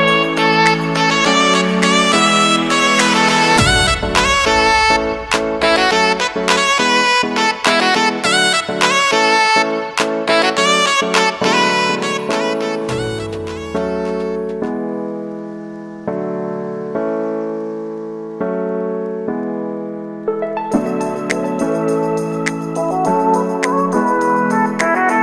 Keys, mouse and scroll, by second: 3.0-5.6 drag, 9.7 ctrl+alt+Home, 10.4 v, 11.0-12.7 drag, 13.6 ctrl+d, 15.3 ctrl+alt+Home, 17.3 click, 18.5 ctrl+alt+Home, 20.8-23.6 drag, 23.6 ctrl+d, 24.2-25.2 drag.